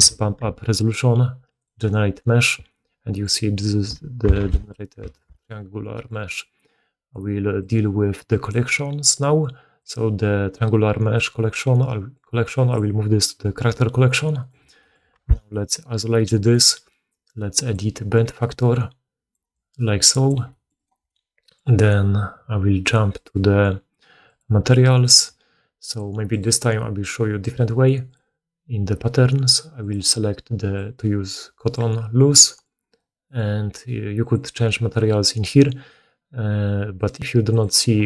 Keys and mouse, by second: 0.1 7, 0.9-1.5 middle drag, 1.5-9.8 drag, 4.3 alt+q, 5.1 alt+a, 6.2-7.3 middle drag, 6.2 right click, 9.8-11.1 middle drag, 11.1-12.6 drag, 12.6-16.0 middle drag, 14.3 right click, 15.0 1, 16.0 right click, 16.2-17.5 middle drag, 17.5-24.3 drag, 24.3-25.7 middle drag, 25.7-38.0 drag, 32.8 middle click, 32.8 right click.